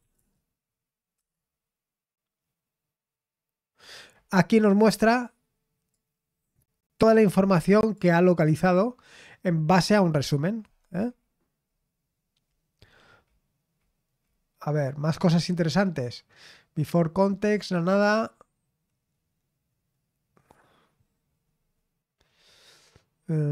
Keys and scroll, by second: 0.0-1.2 typing, 2.3-3.0 typing, 22.3-23.1 scroll down 1, 23.1-23.5 scroll down 1.